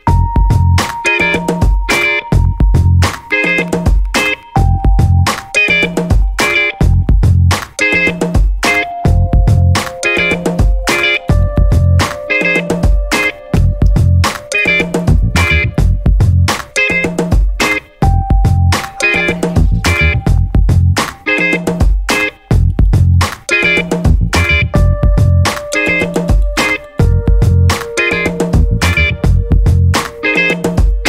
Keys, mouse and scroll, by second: 0.0 click, 1.8 click, 4.0 Return, 5.2 click, 6.6 click, 9.8 click, 10.8 click, 11.4 click, 12.1-17.0 typing, 18.3 Return, 21.4 click, 23.3 scroll down 2, 24.4 click, 26.2 click, 27.3-31.0 typing.